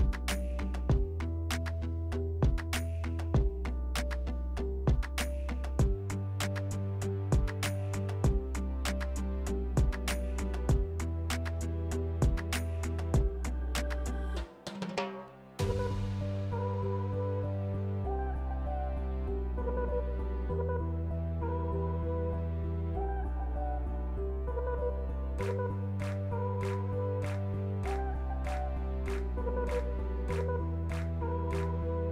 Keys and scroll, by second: 0.0-0.4 typing, 2.6 s, 9.1 3, 10.7 s, 14.3 4, 14.6 s, 17.3-19.2 typing, 21.1 1, 27.0 s.